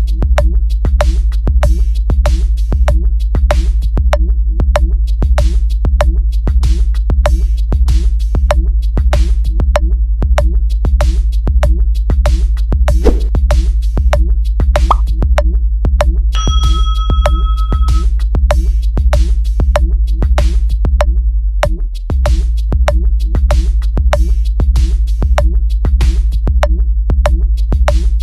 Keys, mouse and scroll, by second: 0.0 click, 0.6 click, 1.3 click, 2.3 click.